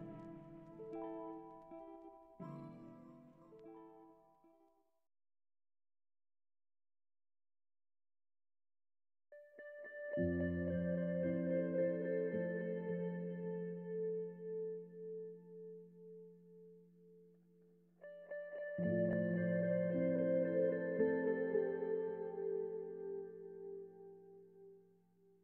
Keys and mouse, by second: 2.6-3.6 drag, 4.2 r, 4.2 x, 4.2 KP_9, 4.4 KP_0, 5.0 Return, 6.0 g, 6.2 y, 7.9 KP_1, 9.0 alt+z, 9.4 Tab, 10.2 BackSpace, 10.3 BackSpace, 10.6 BackSpace, 10.8 BackSpace, 12.0 shift+c, 12.0 shift+a, 12.6 Tab, 13.1 shift+d, 13.9 g, 13.9 z, 16.1 Tab, 16.1-17.2 typing, 19.2 Tab, 21.0 click, 21.9 click.